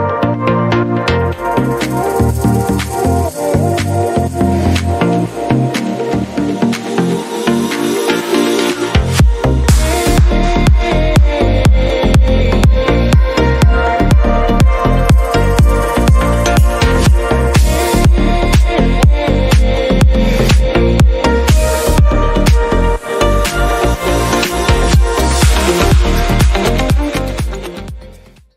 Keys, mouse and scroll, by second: 1.1 click, 2.4 click, 3.5 click, 4.7 click, 5.8 click, 6.8 click, 7.8 click, 8.9 click, 10.8 click, 11.9 click, 12.7 click, 14.2 click, 16.0 click, 16.8 click, 17.5 scroll down 1, 18.3 scroll up 1, 18.9 click, 23.3 click, 24.9 click, 26.1 click.